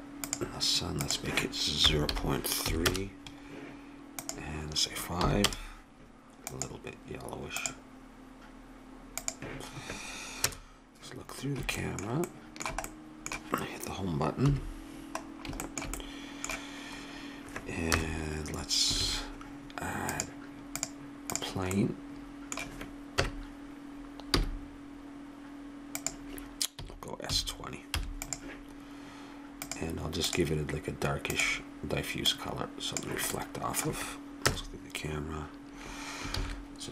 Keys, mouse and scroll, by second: 4.2-6.1 drag, 6.5-9.5 drag, 10.4 KP_0, 11.8-13.7 middle drag, 14.5 Home, 14.7 middle click, 18.0 KP_0, 19.0 shift+a, 23.2 KP_1, 24.3 g, 26.8 s, 29.7-33.3 drag, 33.3 middle click, 34.4 KP_0, 36.7 shift+z.